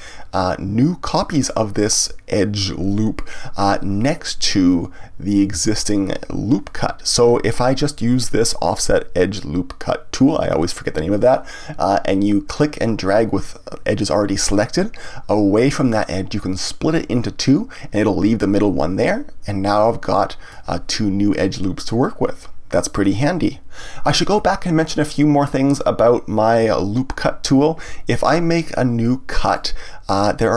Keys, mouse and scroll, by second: 15.0-18.0 drag, 25.9-29.0 drag, 29.4 click.